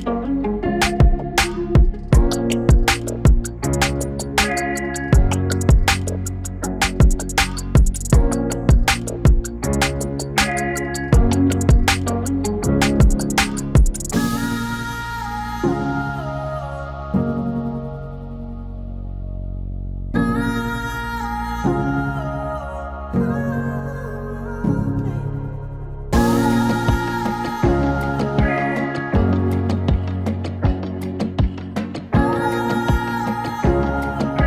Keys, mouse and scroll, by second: 1.2-8.6 drag, 8.4-9.1 typing, 8.8-11.0 drag, 11.0 click, 12.5 click, 16.1-20.4 drag, 21.9-23.8 drag, 26.0-34.4 drag.